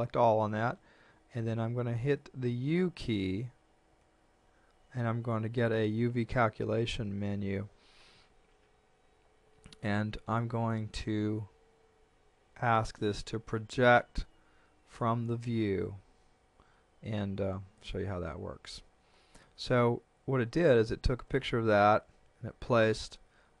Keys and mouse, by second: 3.9 u, 17.2 click.